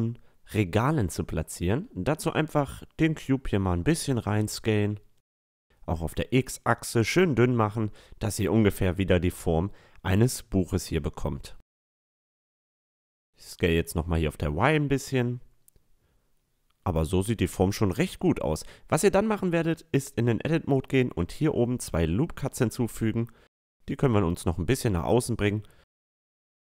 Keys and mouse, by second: 0.4-2.4 drag, 0.7-2.0 middle drag, 2.4 s, 5.3 s, 7.5 s, 9.4-11.3 drag, 10.2 s, 13.3-16.9 middle drag, 13.8 s, 18.6 Tab, 19.4 a, 21.2 ctrl+r, 23.1 s.